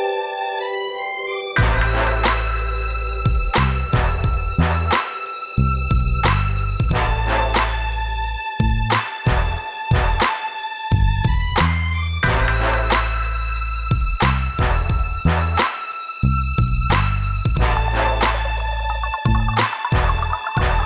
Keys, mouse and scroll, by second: 5.4 scroll up 1, 6.2 click, 13.2 scroll down 2, 17.2 scroll up 1, 18.3 click, 18.8 click.